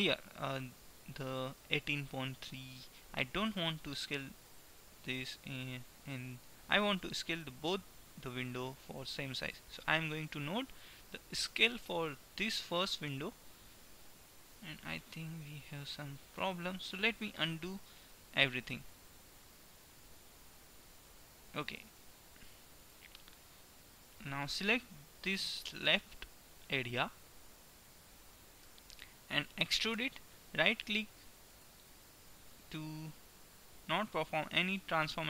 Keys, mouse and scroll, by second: 10.8 right click, 11.8 s, 17.4 ctrl+z, 17.8 ctrl+z, 18.4 ctrl+z, 18.9 ctrl+z, 19.3 ctrl+z, 19.8 ctrl+z, 20.4 ctrl+z, 22.9 middle click, 27.6 KP_1, 28.8 KP_3, 29.9 e, 34.4-35.2 middle drag.